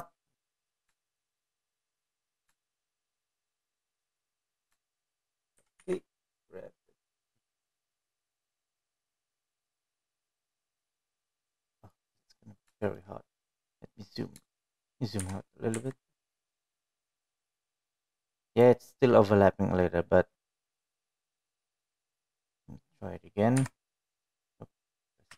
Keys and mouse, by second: 0.0 shift+middle click, 0.3 middle click, 1.1 KP_1, 2.4 shift+middle click, 2.9 middle click, 4.0-5.5 shift+middle drag, 6.2 shift+middle click, 7.0 g, 14.2 shift+middle click, 17.1 g, 25.1 l.